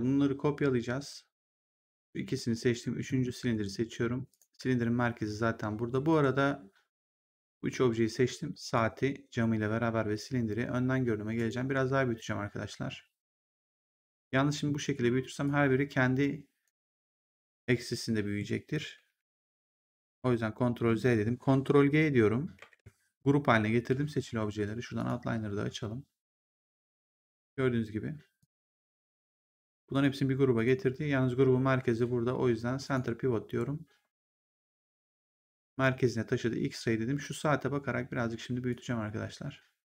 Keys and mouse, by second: 1.9 shift+click, 2.6 shift+click, 3.4 ctrl+1, 4.2 click, 6.0 shift+1, 8.2 click, 11.3 right click, 13.3 click, 15.3 click, 19.9 ctrl+z, 22.5 ctrl+g, 24.9 click, 26.2 click, 28.3 click, 32.7 click, 35.6 click, 38.6 click.